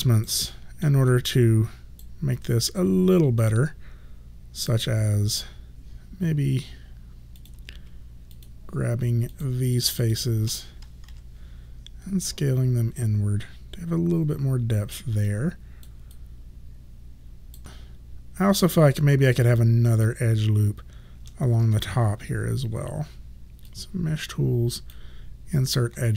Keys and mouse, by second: 0.6 alt+middle click, 1.2 alt+right click, 3.5 right click, 7.5 click, 8.4 shift+click, 11.1 r, 12.3 click, 15.3 alt+click, 16.2 alt+right click, 23.7 click.